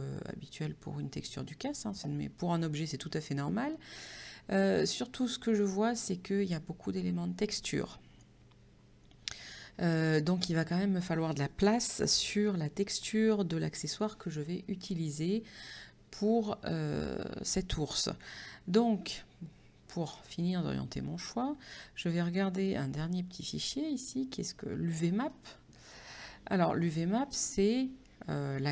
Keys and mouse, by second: 20.3 click, 22.3 click, 24.1 click, 25.3 click.